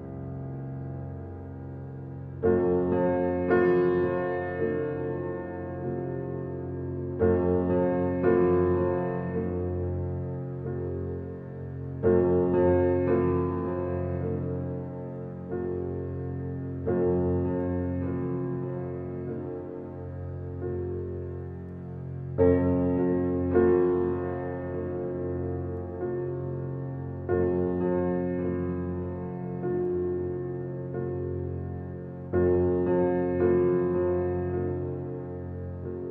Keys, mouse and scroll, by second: 1.2-3.7 drag, 5.4 click, 7.7 click, 8.1 Tab, 8.7-9.9 scroll down 1, 9.9-11.7 scroll down 1, 11.7-17.0 shift+middle drag, 17.0 click, 18.1 click, 20.3 Tab, 21.4-23.8 shift+middle drag, 23.8 click, 25.1 click, 28.0 shift+middle click, 28.5-29.6 scroll up 1, 29.6 click, 31.8 ctrl+click, 34.0-35.3 scroll down 1, 35.7-36.1 drag.